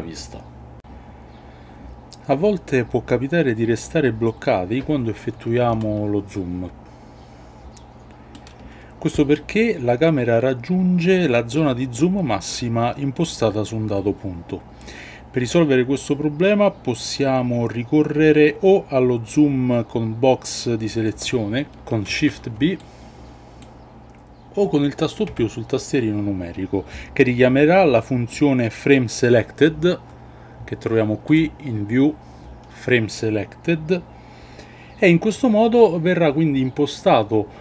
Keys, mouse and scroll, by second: 5.7-8.3 ctrl+middle drag, 21.6 shift+a, 22.0 shift+b, 25.2 KP_Decimal, 31.2-34.6 drag.